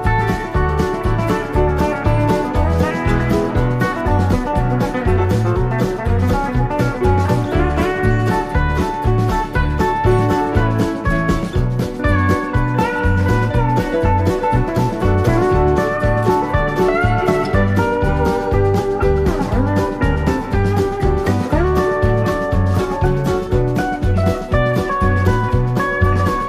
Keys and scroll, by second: 0.9 super+=, 15.1 shift+Right, 15.5 shift+Left, 16.6 i, 23.1 i.